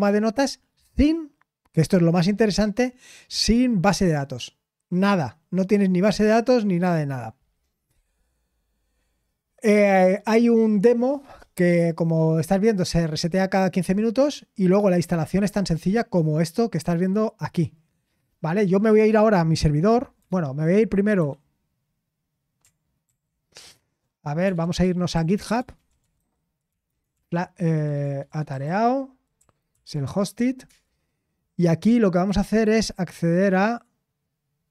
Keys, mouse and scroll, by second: 13.8-15.3 scroll down 1, 18.1 scroll down 1, 20.2 alt+space, 21.1 Escape, 23.0 ctrl+t, 23.8-30.4 typing, 26.6 Right.